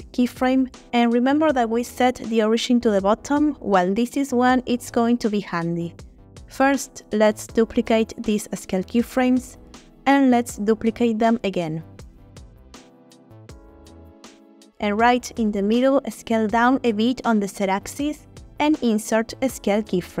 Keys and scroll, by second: 2.2 typing, 2.9 Return, 8.0 shift+d, 11.1 shift+d, 18.0 s, 18.2 z.